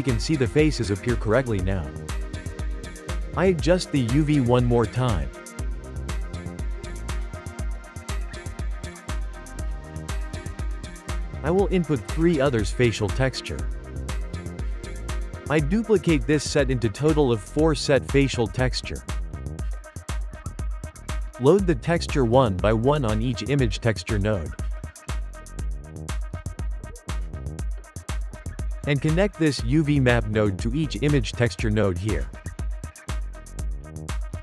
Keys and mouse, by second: 1.3-3.0 drag, 3.0 Tab, 4.1 g, 5.1 g, 5.3 s, 5.8 g, 7.0 ctrl+middle click, 7.4 Tab, 7.6-8.4 middle drag, 8.4 Tab, 8.8 s, 9.5 g, 10.2 Tab, 11.0-12.9 drag, 12.9-14.9 shift+middle drag, 14.9 click, 16.2 shift+middle click, 16.8 shift+d, 17.7 shift+d, 18.5 shift+middle click, 18.7 shift+d, 19.8-21.3 ctrl+middle drag, 21.3 click, 22.5 click, 22.8-23.4 shift+middle drag, 23.4 click, 24.9 click, 25.1 shift+middle click, 25.9 click, 27.1 drag, 27.3 ctrl+shift+middle click, 28.2 click, 29.5 shift+middle click, 29.9 g, 31.0 click, 31.7-32.4 shift+middle drag, 32.4 click, 33.3-34.2 shift+middle drag, 34.2 click.